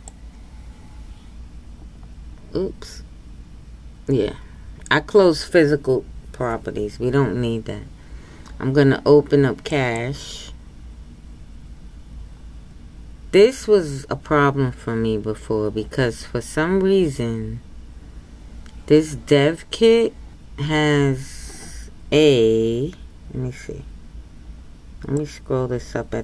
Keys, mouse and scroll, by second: 21.5-22.0 scroll up 2, 25.4 click.